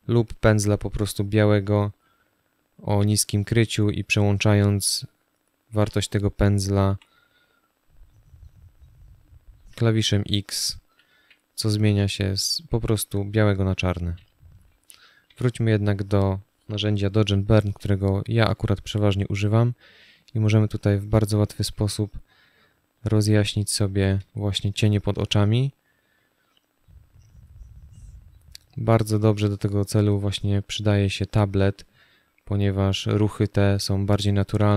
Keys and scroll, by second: 5.4 b, 9.3 x, 14.9 o, 17.5 space, 23.9 space.